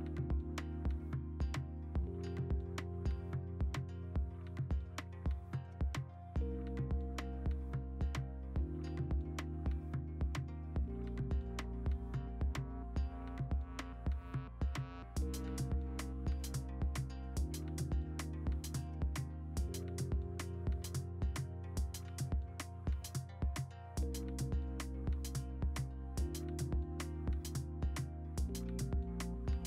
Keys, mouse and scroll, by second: 2.0 v, 5.9 Down, 6.2-7.5 scroll, 14.1 scroll, 14.6 ctrl+alt+g, 14.6 b, 16.6 ctrl+z, 19.0-21.4 typing, 22.3 ctrl+z, 22.5-24.1 typing, 25.0 ctrl+d, 25.4-27.5 typing.